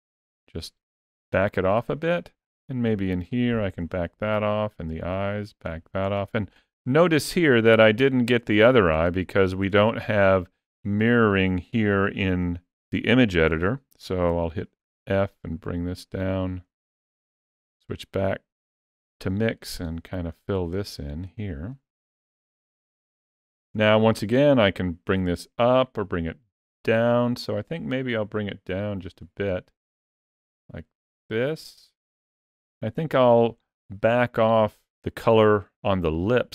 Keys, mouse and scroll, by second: 1.6 click, 4.2 click, 5.0 click, 5.9 click, 7.6 ctrl+middle click, 8.4 shift+middle click, 9.0 ctrl+middle click, 9.6 shift+middle click, 14.1 f, 17.6 click, 19.2 click, 19.7 click, 20.2 click, 20.6 click, 21.1 click, 21.6 click, 22.0 click, 22.6 click, 23.5 click, 24.5 click, 33.0 shift+middle click, 34.0 ctrl+middle click.